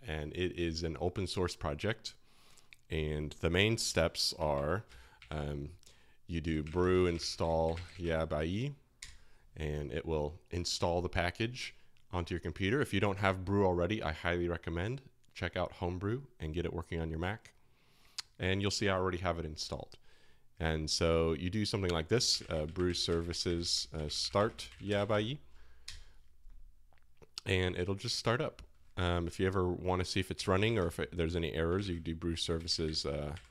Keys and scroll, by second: 4.5 alt+1, 4.8 typing, 6.4-8.5 typing, 9.0 Return, 19.8 typing, 22.0-25.6 typing, 25.8 Return, 30.3-33.5 typing.